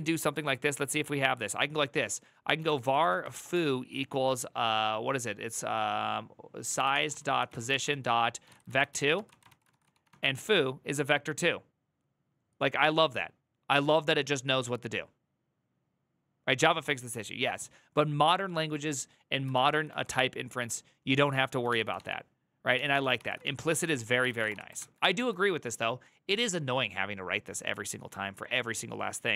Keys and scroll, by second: 2.1-3.7 typing, 6.1-10.3 typing, 19.2-20.1 typing, 21.2-24.5 typing.